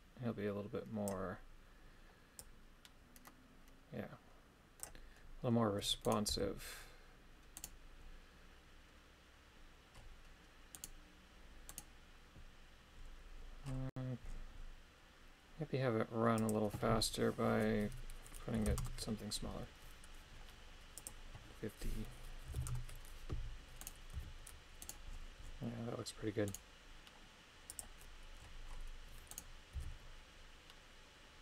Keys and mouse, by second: 2.5-5.0 drag, 6.2 right click, 6.5 g, 7.7 right click, 10.9 right click, 11.8 right click, 16.4-18.9 drag, 21.0-22.8 drag, 23.9 right click, 24.2 g, 27.7 click, 29.3 right click, 29.8 g.